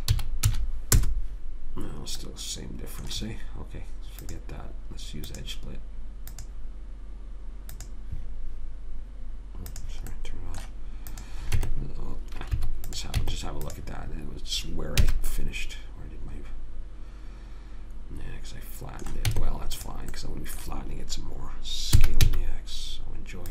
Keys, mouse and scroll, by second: 2.6-4.6 middle drag, 4.6-9.7 drag, 10.5 middle click, 11.9 Tab, 13.5 Tab, 15.4 a, 16.0 middle click, 16.2 middle click, 16.4 middle click, 19.6 Tab, 22.3 s.